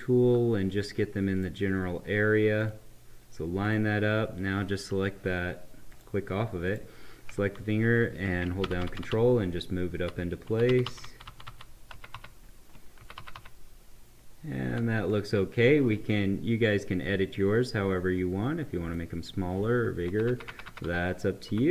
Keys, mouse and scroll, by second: 1.3 click, 8.6 ctrl+Up, 17.5-20.0 drag, 20.0 Left.